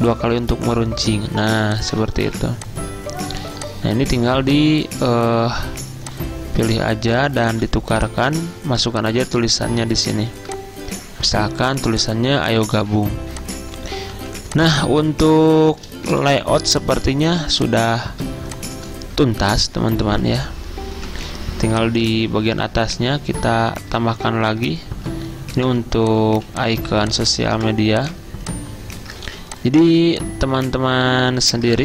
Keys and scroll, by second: 2.4 v, 5.0 i, 7.0-8.1 typing, 14.2 z, 16.2 v, 25.0-26.4 typing, 27.6 typing, 29.3 ctrl+z.